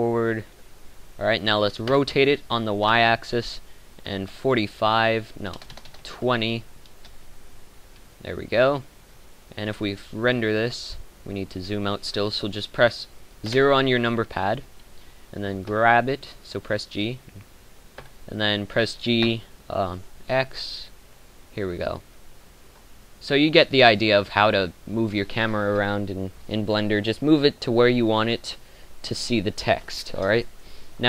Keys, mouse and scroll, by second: 1.8 r, 12.0 Escape, 14.1 KP_0, 15.7 g, 18.3 g, 23.1 g.